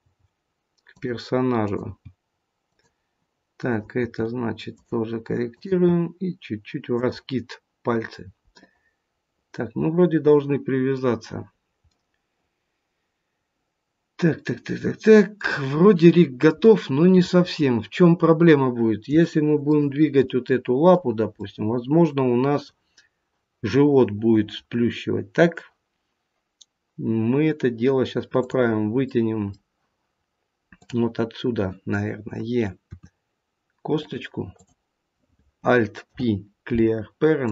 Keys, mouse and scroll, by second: 0.1 g, 1.5 click, 2.1 g, 3.5 click, 4.1 g, 5.5 click, 5.9 g, 7.9-8.2 scroll down 2, 8.5 middle click, 11.4-12.0 scroll down 2, 11.8 middle click, 16.2 scroll down 1, 16.5 middle click, 18.0-19.0 scroll down 1, 19.2 shift+middle click, 20.2 middle click, 21.3 middle click, 24.7-25.5 scroll up 1, 28.3 click, 29.0 middle click, 30.7 click, 32.8 e, 34.5 click, 36.0 alt+p.